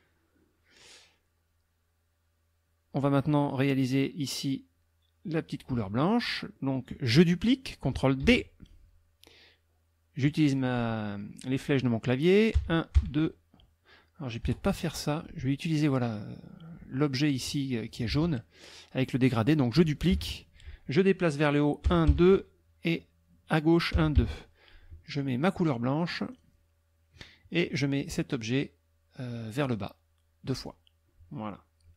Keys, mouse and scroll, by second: 6.5 click, 8.2 ctrl+d, 12.6 Up, 14.4 Delete, 15.5 click, 17.2 click, 18.1 ctrl+z, 20.1 ctrl+d, 21.9 Up, 23.9 Left, 26.3 click, 29.6 click, 30.5 click, 31.6 middle click.